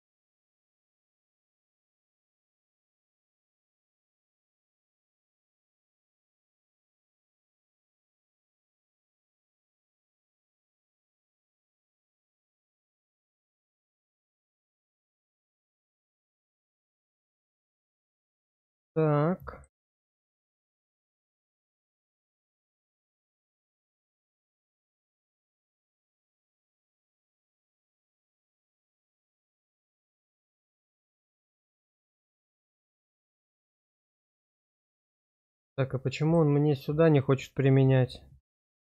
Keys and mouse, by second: 3.7-7.2 middle drag, 7.4 shift+middle click, 7.8-11.6 middle drag, 12.4 click, 13.0 middle click, 13.9 middle click, 17.1-18.3 middle drag, 18.5 shift+middle click, 19.0 middle click, 22.0 click, 24.5-26.8 middle drag, 27.5 click, 28.6 click, 31.2 click, 33.1 click, 36.3-38.8 drag.